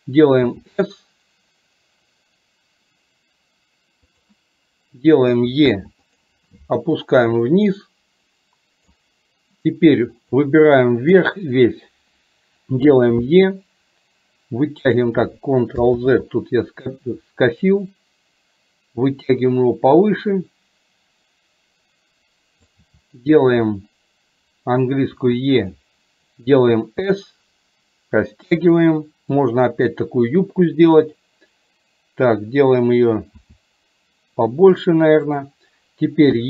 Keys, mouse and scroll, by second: 7.1-9.1 drag, 10.4 click, 17.7-22.7 drag, 29.6-30.9 drag.